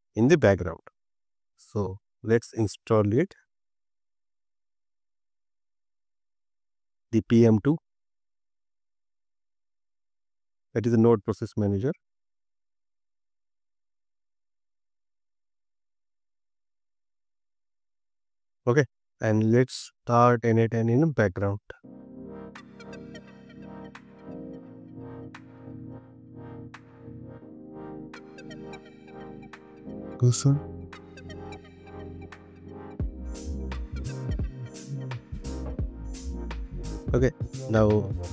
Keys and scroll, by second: 3.4 BackSpace, 21.4 shift+', 21.9 Left, 24.4 Right, 28.8 Up, 29.8 Left, 31.0 BackSpace, 33.8 Right.